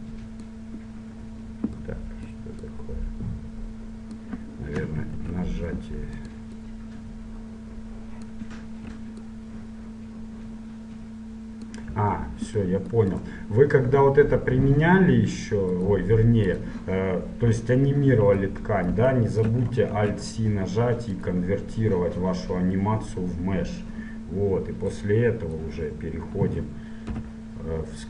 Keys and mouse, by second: 1.0-2.3 middle drag, 2.8-4.6 drag, 5.3 shift+f, 6.5-8.6 drag, 8.8 middle click, 9.4-12.0 drag, 12.8 middle click, 13.2-15.2 drag, 16.7-17.7 drag, 17.7 middle click, 20.1 alt+c, 25.1-27.0 drag, 27.2 KP_Decimal.